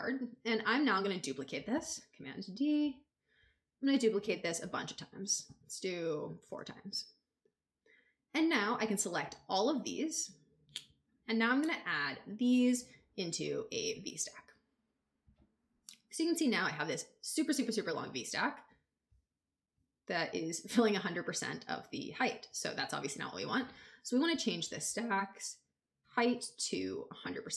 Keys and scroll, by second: 1.6 super+d, 4.5 super+d.